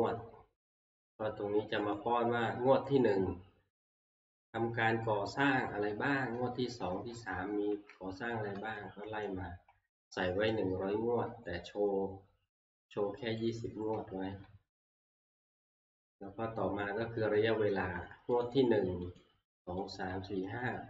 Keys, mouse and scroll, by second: 0.0 Right, 0.5 click, 0.5 KP_1, 2.0-6.9 drag, 5.7 Right, 6.3 Right, 6.7 Right, 7.1 Right, 7.2 Right, 7.5 Right, 8.5 Right, 8.8 Right, 9.0-9.7 Right, 9.9 Right, 10.1-10.9 Right, 11.1 Right, 11.4 Right, 13.5 click, 13.8 Right, 14.1 Right, 14.3 Right, 14.4 Right, 14.9 Right, 15.2 Right, 15.4-16.5 drag, 15.4 Right, 15.9 Right, 16.0 Right, 16.1 Right, 18.0 click, 19.2 click, 20.0 click, 20.7-20.8 Right.